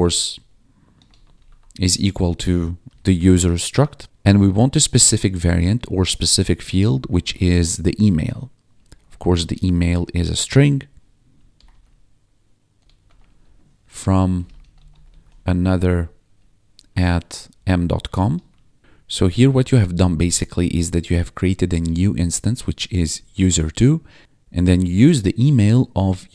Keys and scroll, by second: 0.0-2.8 typing, 3.1 Return, 4.0 ctrl+s, 6.8-10.4 typing, 11.5-15.6 typing, 16.7 shift+2, 17.5 ., 18.0 BackSpace, 18.3 ,, 18.8 Right, 19.2 Left, 19.4 Up, 20.0 Left, 20.3 ctrl+Down, 20.4 Left, 20.9 Left, 22.0 Right, 22.7 ctrl+shift+Right, 23.9 Down, 24.2 Up, 24.4 Down, 24.7 ctrl+shift+Right.